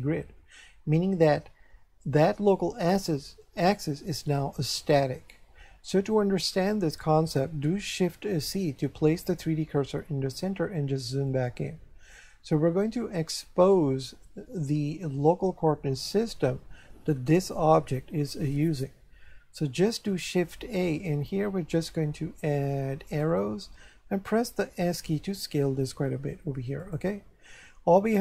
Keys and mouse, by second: 9.1 shift+c, 11.3 shift+middle click, 20.3 shift+a, 23.1 click, 24.6 s, 26.8 click.